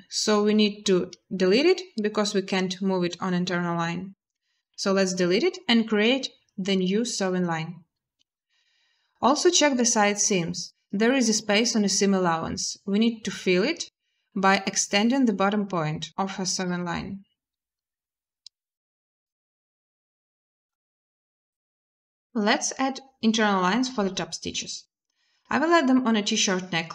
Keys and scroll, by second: 4.4 Delete, 5.7 n, 9.0 b, 21.1 a.